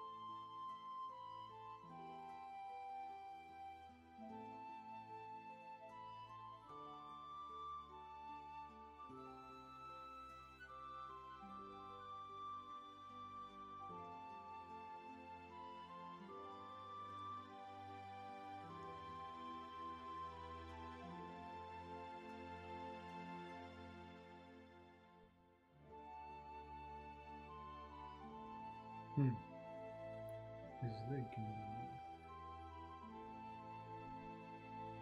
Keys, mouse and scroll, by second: 7.5 ctrl+z, 21.1 ctrl+z.